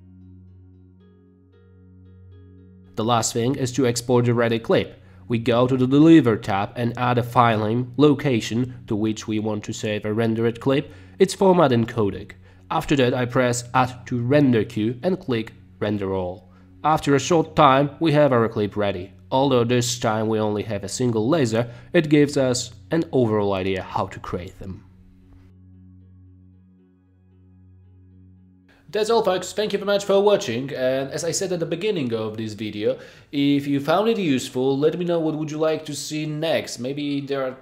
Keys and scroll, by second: 3.0 space, 4.0 space, 7.0-10.2 typing.